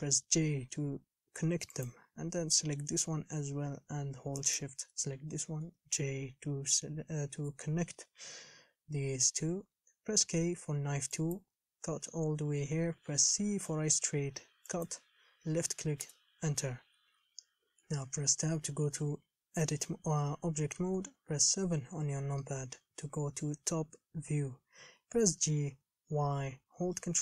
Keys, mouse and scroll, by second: 0.2 j, 2.0 click, 5.9 j, 10.5 k, 16.8-17.9 scroll down 9, 17.9 Tab, 21.2 KP_7, 25.2 g.